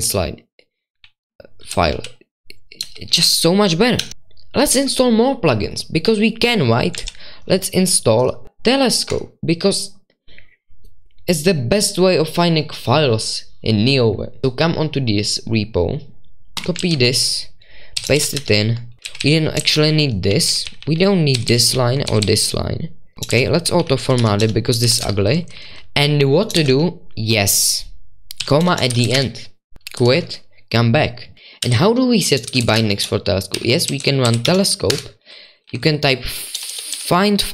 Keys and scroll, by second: 0.0-0.4 typing, 1.7-4.5 typing, 7.0 super+1, 7.5 Return, 16.8 super+2, 17.9-26.5 typing, 18.1 ctrl+v, 28.3-30.5 typing, 34.2-37.5 typing.